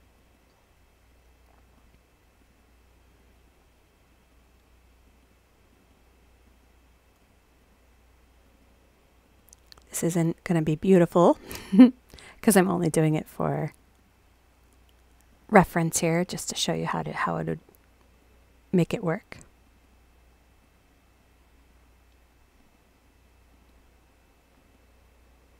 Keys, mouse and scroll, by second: 0.1 click, 0.3 click, 1.6 click, 1.7 click, 2.4 click, 2.5-3.2 scroll up 2, 2.6 click, 3.2 click, 3.3 click, 4.1 click, 4.3 click, 5.0 click, 5.2 click, 5.7 click, 5.9 click, 6.4 click, 6.6 click, 7.2 click, 7.6 click, 8.4 click, 8.6 click, 9.2 click, 9.4 click, 9.9 click, 10.1 click, 10.7 click, 10.8 click, 11.4 click, 11.6 click, 12.3 click, 12.5 click, 13.0 click, 13.2 click, 13.8 click, 14.0 click, 14.7 click, 15.3 click, 15.5 click, 16.9 click, 17.0 click, 18.0 click, 18.2 click, 19.6 click, 19.8 click, 20.6-21.7 drag, 22.6 click, 22.7 click, 23.5 click, 23.7 click, 24.5 click, 24.7 click.